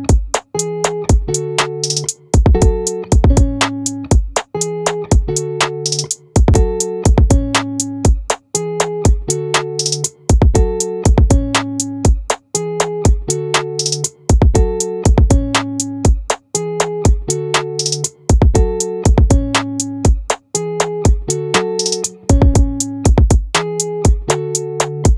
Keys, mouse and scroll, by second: 8.3-10.0 drag, 11.7 ctrl+r, 18.0 click, 18.1-19.9 right drag, 20.9-23.3 drag.